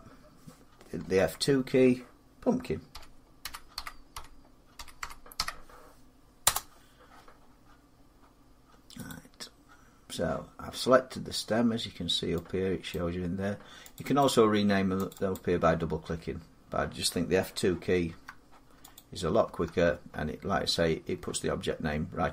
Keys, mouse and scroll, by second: 0.8 F2, 2.7-5.1 typing, 6.2 Return, 7.4-8.8 scroll, 8.9 click, 12.7 click, 14.9 click, 15.1 click, 17.9 F2, 18.7 click, 19.3 F2.